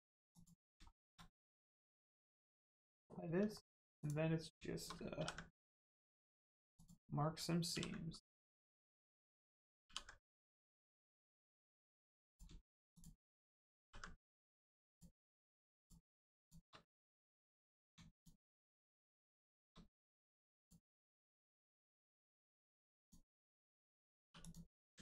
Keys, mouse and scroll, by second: 0.3 click, 0.9 shift+middle click, 1.1 middle click, 3.5 middle click, 3.9 click, 5.1 ctrl+e, 5.9 click, 6.3 middle click, 6.7 click, 7.7 ctrl+e, 8.3 click, 9.8 ctrl+e, 10.6 click, 11.1 middle click, 12.3 click, 12.9 shift+click, 13.8 ctrl+e, 14.5 click, 15.2 middle click, 15.7 shift+click, 16.3 shift+click, 17.5 middle click, 18.1 shift+click, 18.5 middle click, 20.1 middle click, 20.5 click, 21.0 middle click, 23.0 click, 24.2 2, 24.3 click.